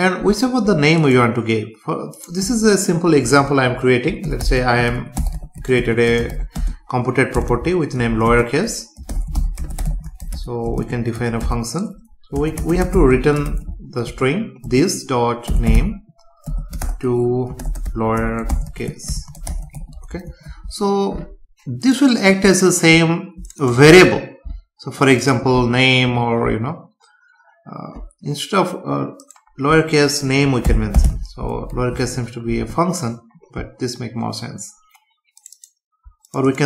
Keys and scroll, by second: 6.1 space, 7.4 BackSpace, 8.3 space, 10.7 space, 11.4 Return, 13.1 space, 20.3 ctrl+s, 31.7 ctrl+s.